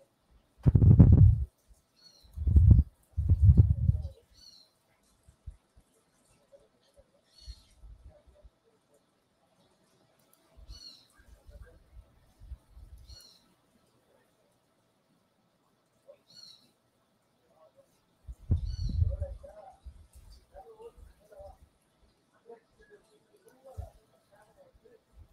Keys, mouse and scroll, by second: 2.2 click, 10.1 click, 12.9 click, 23.3 click.